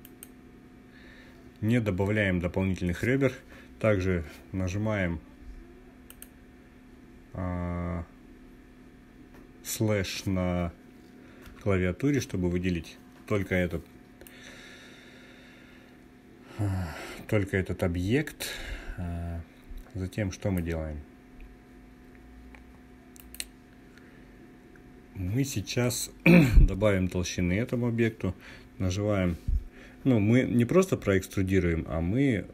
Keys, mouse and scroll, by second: 5.6 click, 13.8-20.3 drag, 22.7 click.